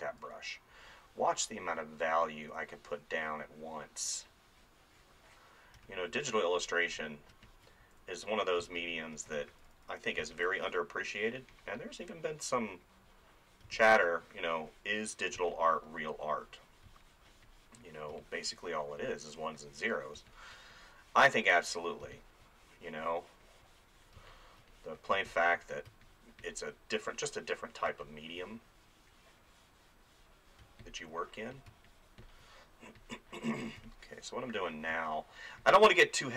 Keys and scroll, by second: 2.4 [, 5.8 space, 7.8 [, 8.6 space, 9.5 [, 10.2 space, 13.7 space, 15.4 space, 20.2 space, 22.1 space, 24.3 space, 27.9 space, 30.6 space, 33.8 space.